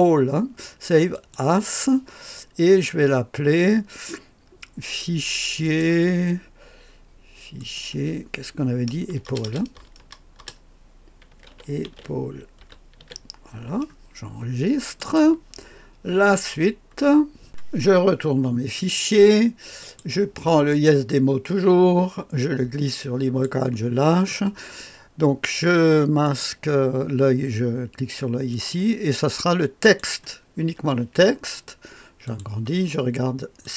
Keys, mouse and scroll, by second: 17.5-18.9 drag, 31.5-33.7 drag.